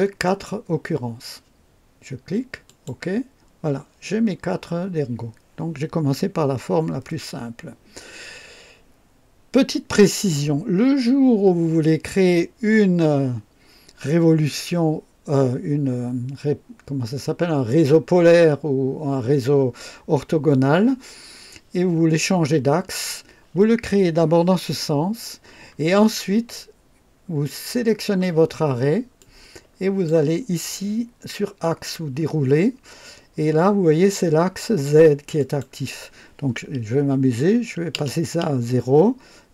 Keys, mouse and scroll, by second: 0.2 click, 2.6 click, 29.1-30.2 drag, 31.5 click, 32.1-32.5 scroll down 1, 35.3 click, 37.8 KP_0, 38.1 KP_0.